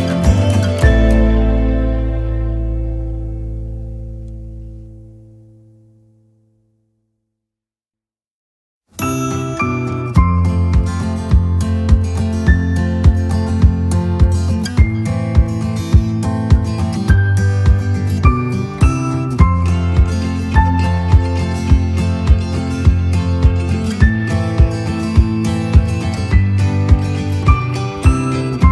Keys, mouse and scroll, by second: 0.3 click, 0.7-3.1 right drag, 4.3 click, 5.3 shift+click, 8.6 click, 9.7 click, 10.3-15.9 right drag, 16.5 click, 19.1 click, 19.9 click, 20.3 right click, 21.6-23.9 drag, 24.4 right click, 25.4 right click, 25.9-26.8 scroll up 1, 26.9 click, 27.9 right click, 27.9 scroll up 1.